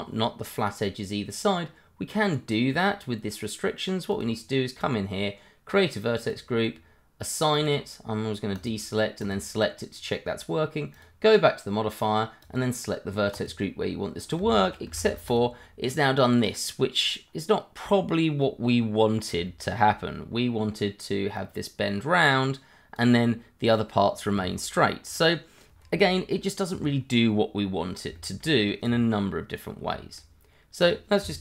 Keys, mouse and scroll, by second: 0.5 scroll up 1, 2.2 click, 6.8 click, 14.4 Tab, 15.0 shift+z, 15.3 click, 15.5 scroll down 1, 16.7 scroll up 1, 19.0 scroll down 1, 19.6 shift+middle click, 21.3 click, 24.8 scroll down 1, 25.1 middle click, 27.0-27.3 scroll up 1, 27.3 middle click, 28.1 shift+middle click, 28.2 middle click, 28.3 shift+middle click, 29.5 scroll down 1, 29.9 shift+middle click, 30.8 click.